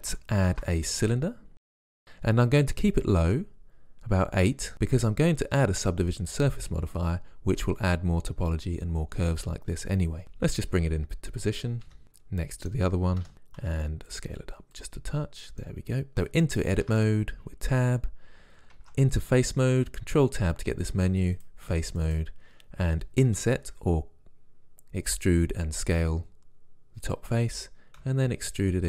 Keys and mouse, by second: 0.6 shift+a, 10.7 KP_1, 11.9 KP_5, 12.0 g, 13.3 KP_5, 13.7 s, 16.9 Tab, 18.8 ctrl+Tab, 22.1 right click, 22.4-23.9 drag, 23.4 i, 28.1 e.